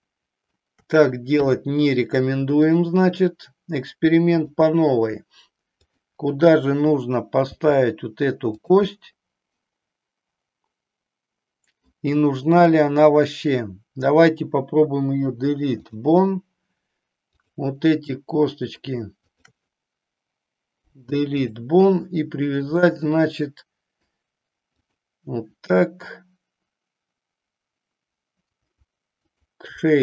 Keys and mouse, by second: 1.4 KP_3, 2.7-4.7 drag, 7.4 g, 8.6 click, 8.9-11.8 middle drag, 12.6 click, 15.2 Delete, 18.2 middle click, 19.2 shift+click, 20.8 Delete, 22.8-24.2 middle drag, 24.7 click, 29.2 shift+click.